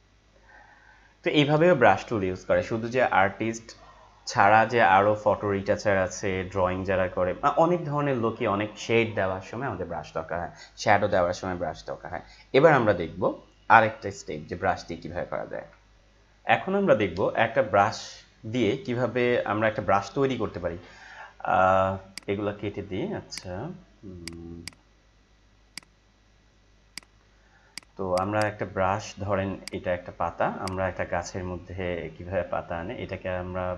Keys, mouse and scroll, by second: 15.8 ctrl+Num_Lock, 16.0 click, 16.5 click, 22.1 click.